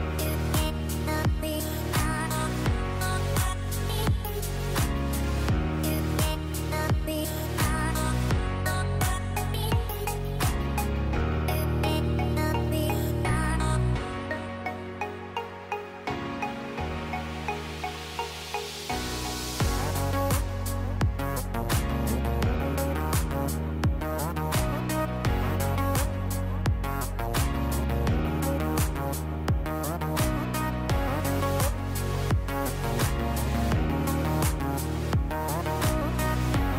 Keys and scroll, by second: 8.3 shift+Right, 12.0 Right, 12.5 shift+Right, 13.1 shift+Right, 24.9 F9, 34.2 space.